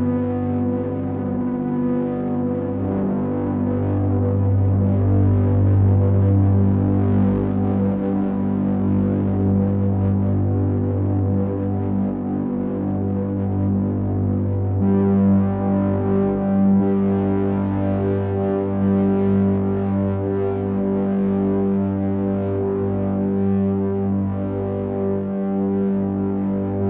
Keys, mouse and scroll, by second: 3.6 click, 5.8 click, 10.5 shift+scroll up 1, 10.7 shift+middle click, 11.6-13.4 scroll up 4, 17.2 click, 22.8 click.